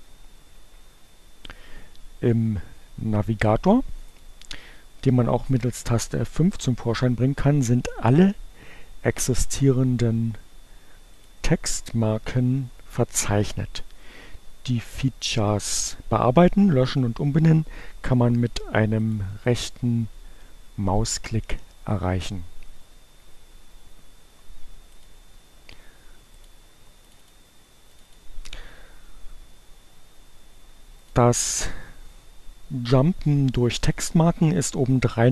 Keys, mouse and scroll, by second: 3.1 click, 10.9 click, 18.2 click, 19.1 right click, 24.4 click, 26.3 click, 26.9 click, 27.8 click, 31.0 click.